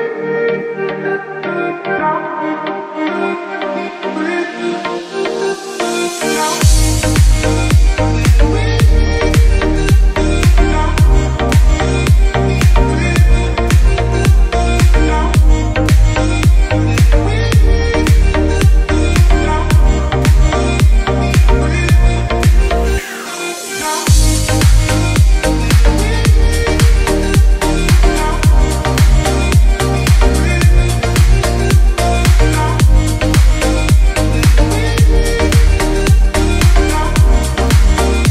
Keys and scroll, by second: 6.1 g, 12.2 space, 14.0 ctrl+r, 14.7 Escape, 15.6 shift+Page_Up, 16.0 F3, 16.4 Escape, 16.8 F3, 19.8 Escape, 20.0 F2, 21.3 Escape, 22.1 alt+c, 22.1 alt+w, 22.7 p, 24.3 Escape, 24.9 F3, 25.3 Escape, 27.2 F2, 28.7 ctrl+k, 33.4 ctrl+space, 37.9 shift+F11.